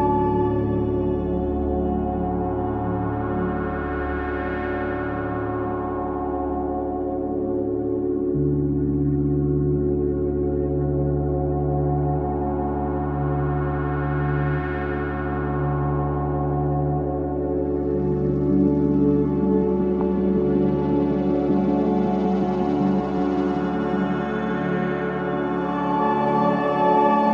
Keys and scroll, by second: 3.6 ctrl+z, 4.4 ], 6.7 ], 12.7 ], 13.0 ], 13.5 ], 19.2 4, 22.2 F9, 25.6 3.